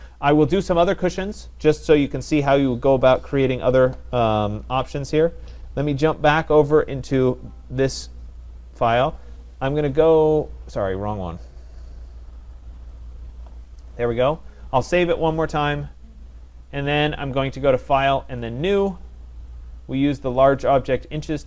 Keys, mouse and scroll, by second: 2.3 click, 5.3 click, 7.1 click, 8.5 click, 11.8 click, 13.1 click, 14.4 click, 15.8 click, 17.5 click, 18.4 click, 20.5 click, 20.8 click.